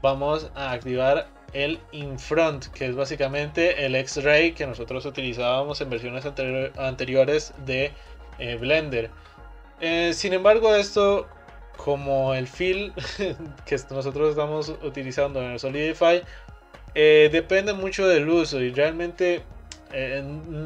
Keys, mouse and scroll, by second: 0.8 click, 2.6-6.4 middle drag.